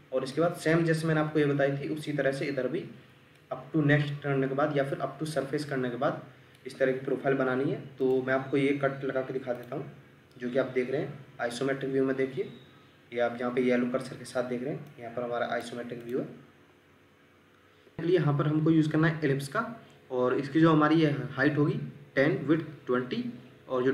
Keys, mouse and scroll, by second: 0.3 middle click.